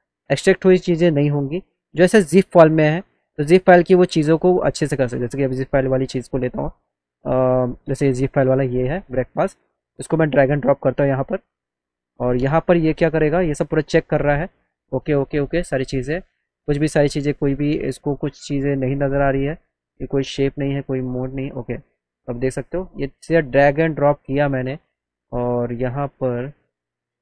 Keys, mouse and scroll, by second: 0.6 click, 0.9-1.3 scroll down 2, 1.3 click, 3.2 click, 4.4 scroll down 1, 5.3-6.1 scroll down 3, 6.7 scroll down 1, 6.8 scroll up 1, 7.1 scroll down 1, 8.1 click, 8.4 click, 9.4 click, 10.4 click, 21.2 click, 26.4 middle click.